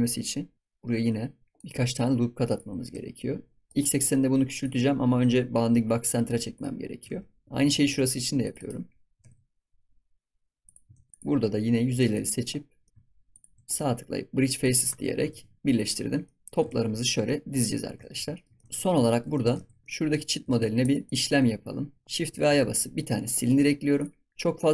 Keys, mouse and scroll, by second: 0.5-1.6 middle drag, 1.6 s, 2.4 click, 4.5-7.0 drag, 7.0 s, 7.7 ctrl+r, 9.0 s, 10.9 ctrl+s, 11.1-12.1 drag, 12.8 shift+middle click, 13.3 shift+click, 13.6-14.8 right drag, 14.8 Tab, 15.0 scroll down 1, 15.3 ctrl+s, 15.7 click, 16.0 scroll up 5, 16.2-16.6 middle drag, 16.6 ctrl+s, 17.2-17.8 middle drag, 17.8 scroll up 2, 18.0 ctrl+s, 18.0 scroll down 2, 18.3 shift+middle click, 18.6 ctrl+s, 18.7-19.1 scroll down 3, 19.1-19.5 shift+middle drag, 19.5 ctrl+s, 19.8-20.2 shift+middle drag, 20.2 scroll up 2, 20.4 ctrl+s, 20.5 scroll down 1, 20.8 click, 22.2 shift+a, 24.3-24.7 scroll down 3.